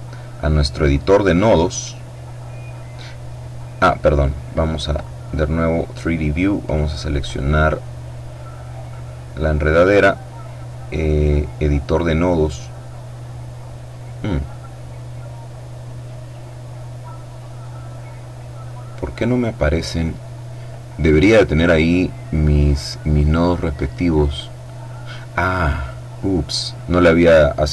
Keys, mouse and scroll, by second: 0.8 click, 4.8 click, 6.2-7.4 right drag, 8.4 click, 10.6 click, 11.5-12.7 scroll down 1, 12.7-13.4 scroll up 1, 13.4-14.0 scroll up 1, 15.8 click, 17.9-19.4 drag, 22.0-23.0 middle drag, 23.3 click, 23.4-24.0 scroll up 1, 25.3 click.